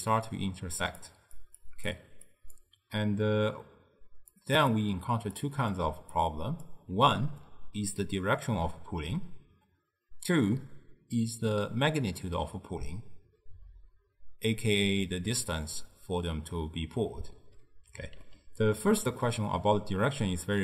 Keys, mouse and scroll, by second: 0.8-6.9 typing, 1.1 click, 1.7 click, 2.4 click, 4.4 click, 5.5 click, 6.2-6.6 drag, 18.3-20.6 ctrl+middle drag.